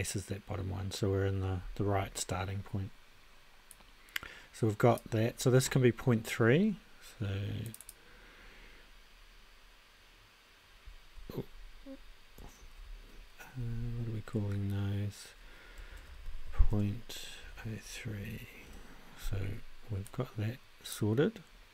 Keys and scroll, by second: 12.6 shift+`, 15.6-18.0 typing, 18.6 Return.